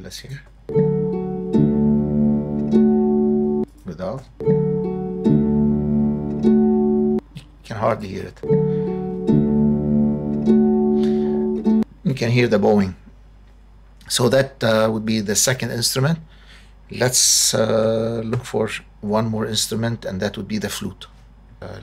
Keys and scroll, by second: 0.5 space, 3.4 space, 7.0 space, 11.6 space, 18.3 super+=.